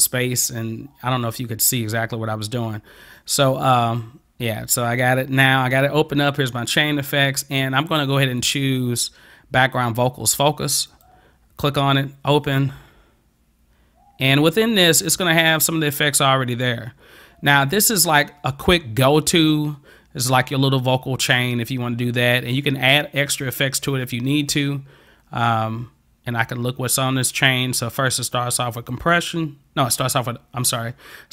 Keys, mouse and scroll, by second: 10.9 click, 12.5 click, 28.8 click, 29.1 click.